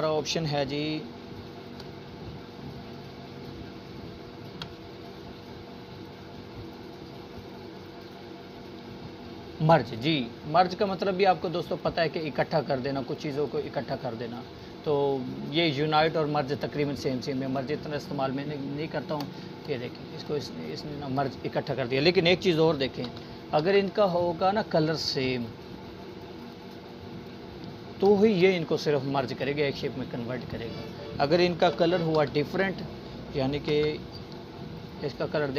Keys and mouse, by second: 0.5-1.1 alt+drag, 9.3-9.7 drag, 17.1-17.4 drag, 19.0 ctrl+z, 21.8-24.0 drag, 28.2 ctrl+z, 30.2 ctrl+z, 31.2-35.5 drag.